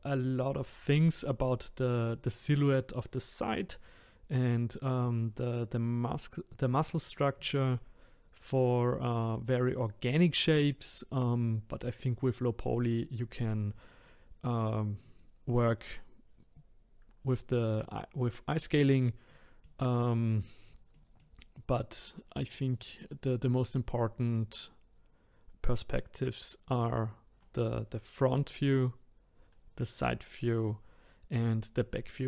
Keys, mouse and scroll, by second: 19.2 middle click, 19.9-20.4 scroll down 1, 20.4-22.6 middle drag, 22.6 click, 23.2-23.6 scroll up 4, 23.6-26.7 scroll down 1.